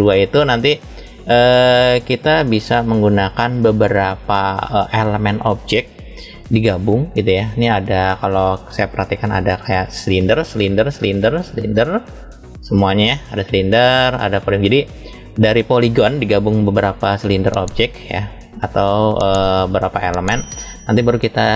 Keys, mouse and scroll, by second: 0.5 shift+middle click, 1.5-2.1 scroll up 3, 2.4-3.6 shift+middle drag, 4.1 shift+middle click, 7.9 click, 8.6 click, 9.3 click, 10.4 click, 11.1 click, 12.2 click, 12.5 click, 13.2 click, 13.9 click, 15.5 click, 16.4 click, 17.1 click, 17.4 click, 17.9 click, 19.2-20.9 middle drag.